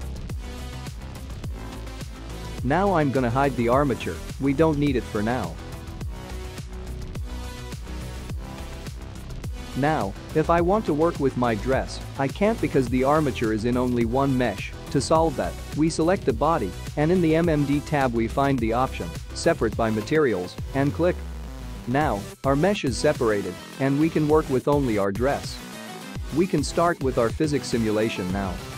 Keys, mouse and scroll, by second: 5.7 click, 6.6 click, 8.1 click, 9.3 click, 11.5 click, 16.8 click, 20.6 click, 21.8 click, 22.5 g, 23.5 click, 23.8 g, 24.8 click, 25.1 g, 27.2-27.8 scroll down 3, 27.8 g.